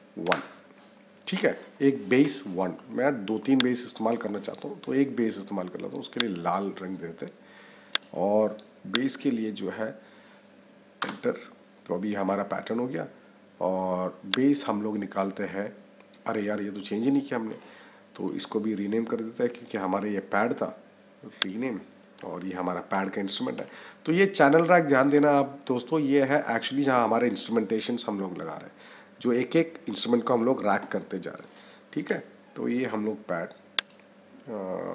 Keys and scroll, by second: 10.9 Return, 23.5 d.